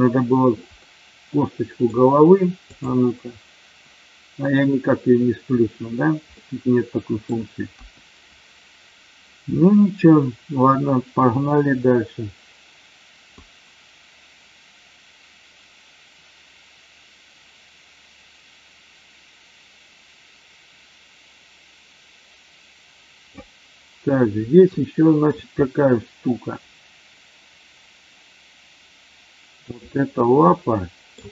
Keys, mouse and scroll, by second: 0.7-1.9 middle drag, 2.7 click, 6.4-7.1 middle drag, 13.4-23.4 drag, 24.7-25.2 shift+middle drag, 29.6-30.1 drag, 30.5-31.1 middle drag.